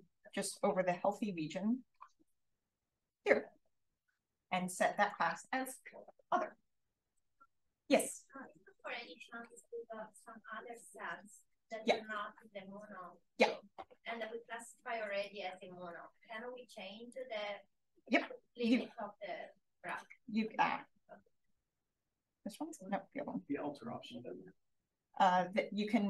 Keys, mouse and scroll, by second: 4.9 click, 14.9 space, 15.2-16.3 drag, 17.9 b, 19.8 super+click, 21.1 BackSpace, 21.5 click, 22.5 click, 23.5 BackSpace, 23.9 click, 24.8-26.0 alt+drag.